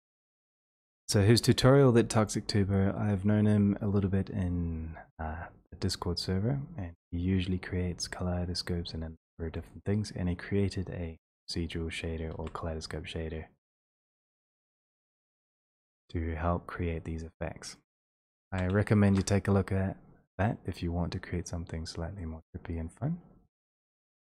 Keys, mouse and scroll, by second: 6.5 click, 6.5 scroll up 3, 9.7 click, 11.4 middle click, 12.4 ctrl+c, 13.8 click, 15.1 click, 18.5 ctrl+v, 18.5 click, 19.1 Return.